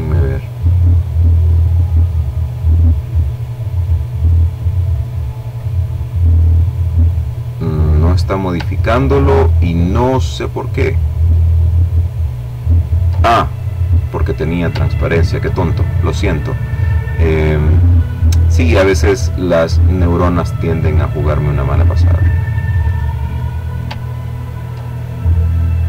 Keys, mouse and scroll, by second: 1.7-3.1 drag, 3.2 click, 3.9 click, 4.8 click, 7.2-7.7 ctrl+scroll down 2, 8.4-8.9 ctrl+scroll down 2, 12.1-13.1 drag, 13.2-13.8 ctrl+scroll up 2, 14.8-19.0 drag, 19.5-21.7 drag, 22.5-23.0 ctrl+scroll down 2, 23.8-25.7 drag.